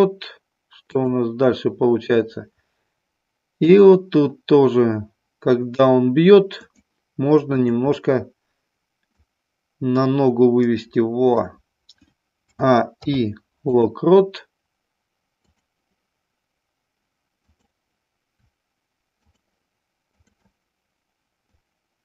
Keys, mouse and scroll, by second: 0.9 click, 6.6 shift+click, 7.6 shift+click, 9.1-11.4 drag, 12.5 a, 13.0 i, 15.5 click, 19.1 shift+click, 20.1 shift+click, 21.5-22.0 drag.